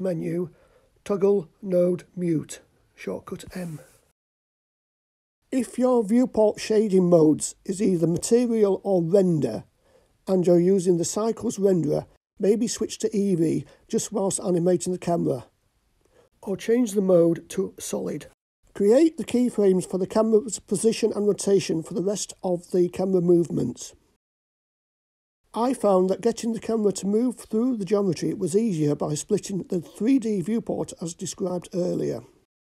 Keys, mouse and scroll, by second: 1.6 click, 2.4 m, 3.4 click, 4.0 m, 5.4 click, 6.9 click, 8.4-10.0 drag, 12.7 click, 20.4-23.6 drag, 26.6-29.3 drag, 32.4 click.